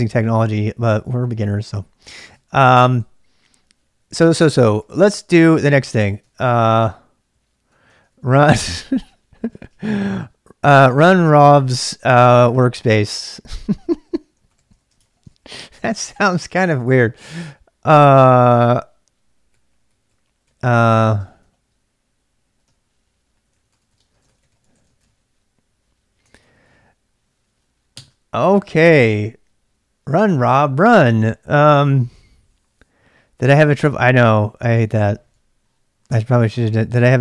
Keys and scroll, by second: 2.4-9.2 typing, 6.3 ctrl+[, 10.6-28.4 typing, 30.6-31.4 typing.